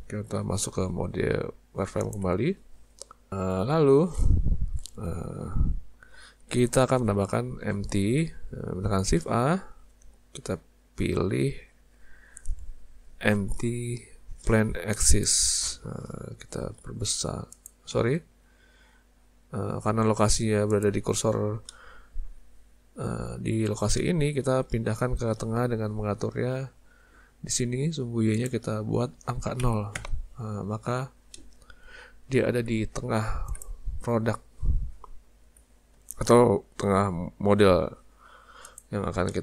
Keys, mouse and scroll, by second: 9.2 shift+a, 18.0 ctrl+shift+z, 19.6 s, 21.7 middle click, 24.0 shift+middle click, 28.4 click, 31.3 middle click, 32.9 z, 34.0-34.4 scroll up 2, 35.5 s, 39.3 shift+middle click.